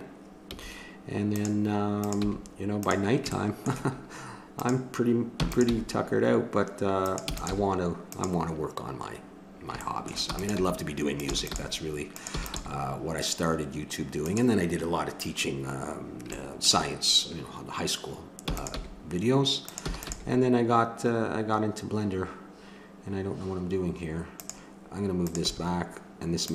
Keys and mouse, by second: 0.5 g, 2.0 click, 2.2 g, 5.3 e, 7.2 e, 10.3-12.6 typing, 16.4 middle click, 18.4 e, 18.8 g, 19.8 e, 20.3 g, 25.2-26.5 drag, 25.4 g.